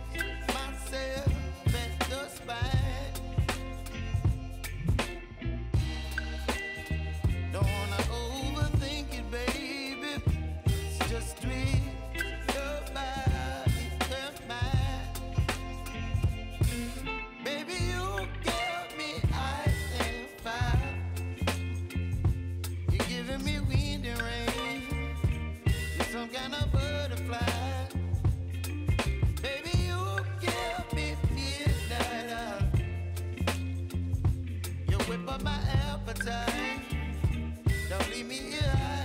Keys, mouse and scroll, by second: 0.2-18.4 drag, 19.3 ctrl+i, 20.6 click, 21.2 Return, 23.7-26.1 drag, 28.3 s, 29.2-39.0 drag.